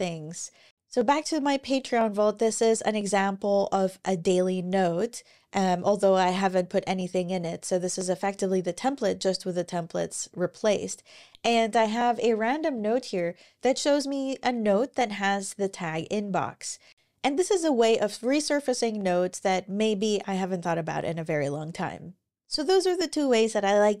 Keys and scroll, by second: 10.4 Down, 11.4 Right.